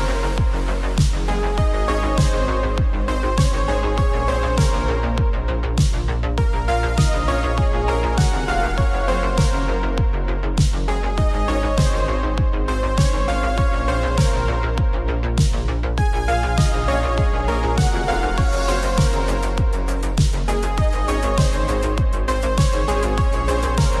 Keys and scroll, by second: 0.8 z, 2.1 v, 3.8 super+0.